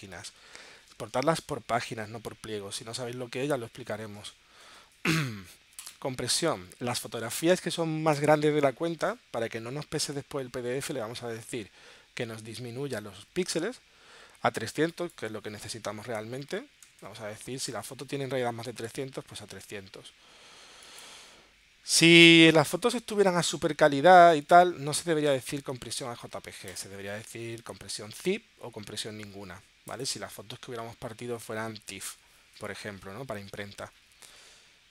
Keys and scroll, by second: 16.6 3, 17.0 0, 21.8 3, 22.4 0.